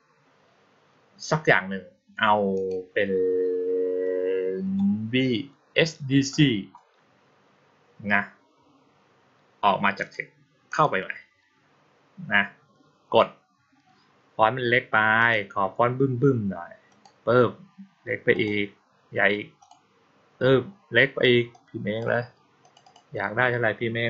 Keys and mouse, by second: 2.4 click, 9.9 click, 10.5 click, 15.0 click, 16.7 click, 18.2 click, 19.5 click, 21.4 click, 22.5 click, 22.7 click.